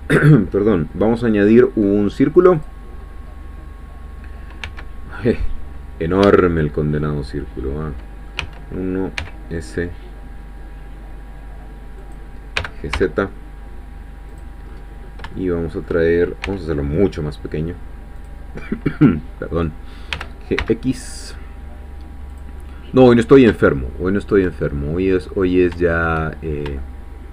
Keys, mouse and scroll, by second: 2.6 click, 3.1-3.6 scroll down 1, 4.6 s, 6.2 Escape, 6.7-7.0 scroll down 1, 7.0-9.0 middle drag, 8.4 1, 9.2 s, 12.0 click, 12.6 g, 12.9 z, 14.3 click, 14.7-15.3 scroll up 1, 15.3 shift+scroll up 1, 15.3-16.4 shift+middle drag, 16.5 s, 18.2 click, 20.1 g, 20.6 x, 22.3 click, 22.6-24.5 middle drag, 25.9 shift+middle click, 26.4 shift+scroll up 1, 26.8-27.3 shift+middle drag.